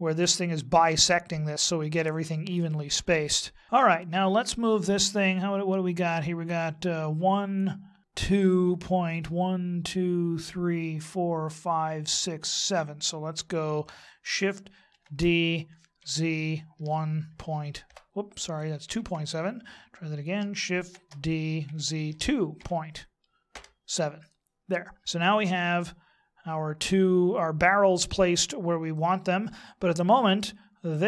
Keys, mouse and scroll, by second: 3.3 shift+middle click, 14.9 shift+d, 18.8 ctrl+z, 20.8 shift+d, 25.5 middle click, 28.4 scroll down 3, 28.9 middle click, 30.9 right click.